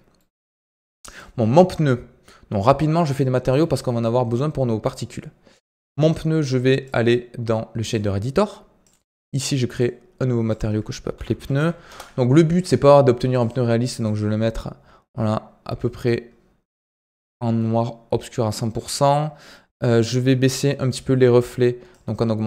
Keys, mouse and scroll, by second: 0.1-1.0 middle drag, 1.0-12.5 drag, 12.5-12.9 scroll up 9, 13.3-16.3 drag, 17.5-19.6 middle drag, 19.6-22.4 scroll up 5, 20.0 shift+middle click.